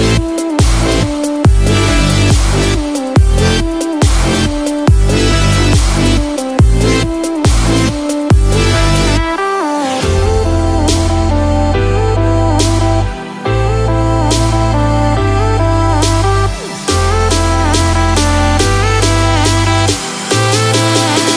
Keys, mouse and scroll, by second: 19.5 click.